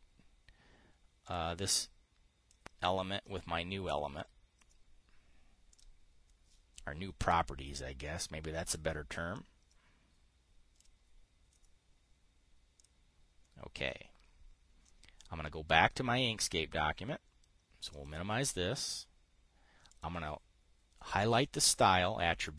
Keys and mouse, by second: 1.8 click, 3.0-4.8 drag, 9.8 click, 18.4 click, 20.4 click.